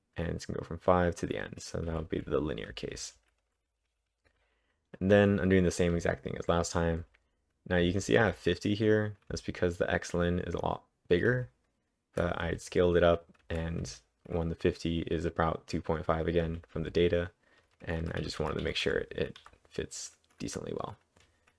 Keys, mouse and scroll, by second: 1.9-8.3 typing, 16.5-19.9 typing.